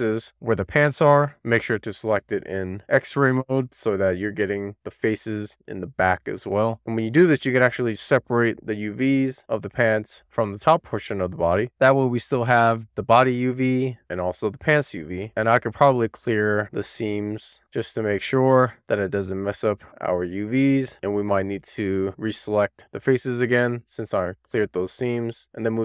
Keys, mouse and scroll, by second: 0.0 shift+click, 0.8 shift+click, 1.7 alt+z, 1.9 shift+click, 2.7 shift+click, 3.2 shift+click, 3.7 shift+click, 4.5 shift+click, 5.2 shift+click, 5.4 middle click, 5.6 scroll down 1, 5.8 middle click, 7.7 click, 9.1 super+z, 12.1 click, 14.5-15.2 scroll down 1, 15.2 a, 16.7 u, 18.6-19.2 scroll down 2, 19.2 scroll down 2, 19.6 shift+middle click, 20.4-21.2 scroll up 1, 21.2 middle click, 22.0 alt+middle click, 23.8 u, 25.4 click.